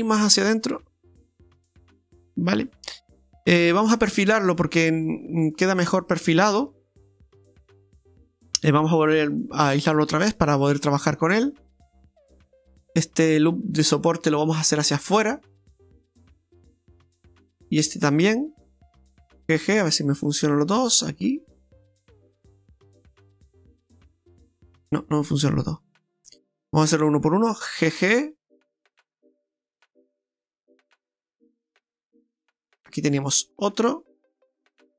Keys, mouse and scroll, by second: 2.7 middle click, 3.6 Tab, 4.0 middle click, 4.5 middle click, 6.7 Tab, 7.0 scroll up 2, 7.2 middle click, 7.7-9.0 scroll up 3, 9.1 KP_Divide, 10.1-10.6 scroll up 3, 10.7 shift+middle click, 11.3-11.7 scroll up 2, 11.7 shift+middle click, 12.3 scroll up 1, 13.2 right click, 14.6 click, 15.7 right click, 16.1 alt+shift+right click, 16.3 right click, 18.2 right click, 19.6 g, 23.6 middle click, 25.5 middle click, 25.5 ctrl+z, 25.8 ctrl+z, 26.4 middle click, 27.8 g, 30.1 middle click, 30.3 middle click, 32.6 right click, 33.1 right click, 34.2 right click, 34.4 right click, 34.6 alt+shift+right click, 34.6 alt+shift+right click, 34.7 right click.